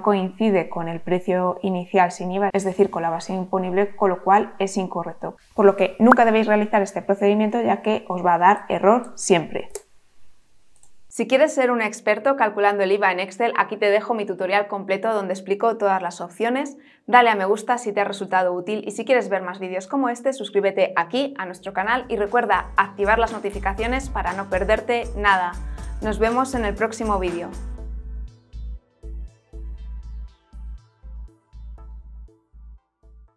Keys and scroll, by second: 9.6 Delete.